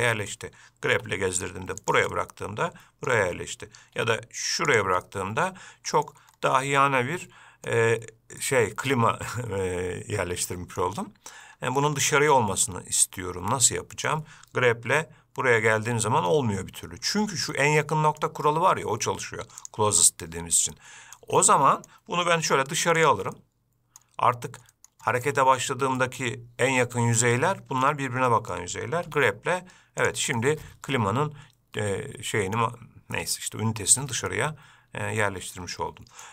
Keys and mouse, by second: 1.1 g, 2.3-3.3 middle drag, 4.1 g, 5.3-6.3 middle drag, 6.9-7.9 middle drag, 8.6-11.0 middle drag, 12.4-14.3 middle drag, 15.1 g, 17.7-18.4 middle drag, 19.9-20.6 drag, 20.9-21.3 middle drag, 21.6-22.1 middle drag, 22.6 g, 23.6-24.2 middle drag, 24.9 middle click, 25.3 shift+middle drag, 26.2 middle click, 27.7-28.1 middle drag, 28.5 middle click, 29.2 g, 30.5-32.8 middle drag, 34.5-36.3 middle drag.